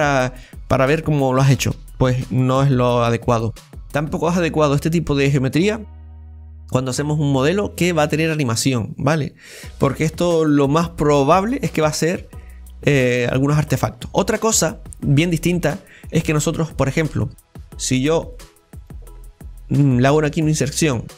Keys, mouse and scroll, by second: 14.2 scroll down 1, 14.4-15.5 middle drag, 15.5 scroll up 2, 15.8-18.2 middle drag, 18.2 right click, 18.3 click, 18.8-20.2 right drag.